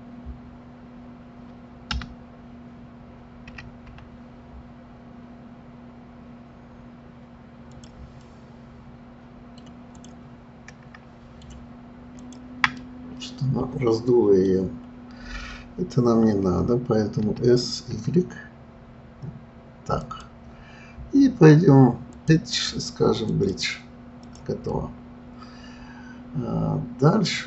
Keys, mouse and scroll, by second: 3.5 s, 8.2-9.9 middle drag, 9.9 click, 10.7-12.2 middle drag, 12.2 shift+click, 12.8-15.8 middle drag, 17.2 s, 22.1-24.3 drag, 24.7-27.4 middle drag.